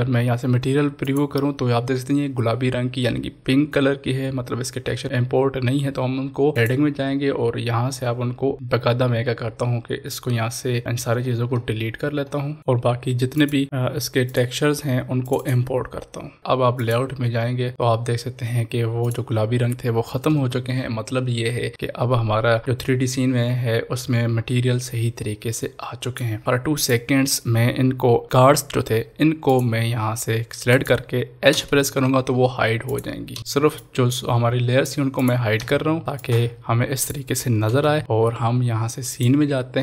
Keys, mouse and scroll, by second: 1.0 click, 6.5 click, 7.7-9.1 scroll down 1, 10.8-12.6 scroll down 1, 12.6 click, 19.1 click, 22.6-26.8 drag, 29.4 click, 29.4 click, 31.5 h, 32.8 click, 33.3 h, 33.7 click, 35.6 h, 36.1-37.6 drag, 37.6 ctrl+s, 39.1 click.